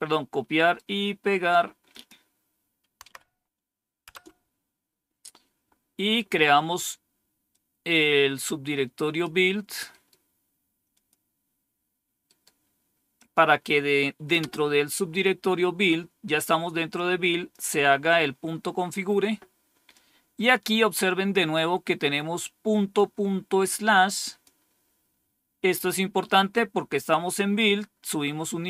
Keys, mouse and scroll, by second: 0.4 right click, 1.8 click, 3.0 Tab, 4.0 Return, 7.4-9.1 drag, 9.8 right click, 10.8 click, 12.1 right click, 13.1 click, 14.3 Return, 16.8 click, 18.2-18.7 scroll down 1, 19.8-21.2 drag, 22.8-24.4 drag, 28.3-28.6 drag.